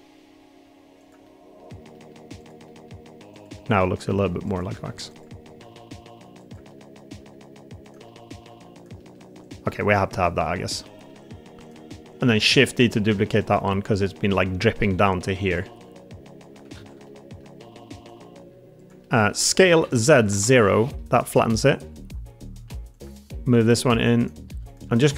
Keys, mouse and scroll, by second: 1.1 click, 1.2 middle click, 1.8 middle click, 2.5 middle click, 3.2 click, 3.7 middle click, 4.7 alt+z, 5.0 click, 5.6 alt+z, 5.7 g, 6.6 middle click, 7.0 click, 7.1 g, 7.7 click, 8.0 middle click, 8.5 g, 8.6 click, 8.9 middle click, 9.5 middle click, 9.8 click, 10.1 middle click, 10.6 middle click, 11.4 g, 12.2 shift+d, 12.7 g, 14.7 e, 15.6 g, 16.6 ctrl+z, 17.0 middle click, 17.5 r, 18.2 g, 18.9 click, 19.0 middle click, 19.5 s, 19.7 z, 20.1 0, 20.2 Return, 20.9 middle click, 21.4 shift+middle click, 21.8 middle click, 22.6 1, 22.8 click, 23.2 middle click, 23.5 g, 24.4 3, 24.8 middle click.